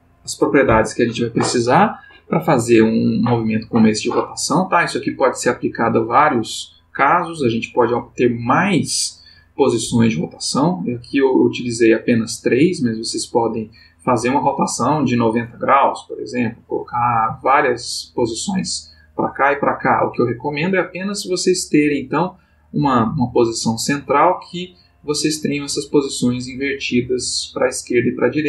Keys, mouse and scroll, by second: 11.3 click, 13.0 click, 14.2-18.1 drag.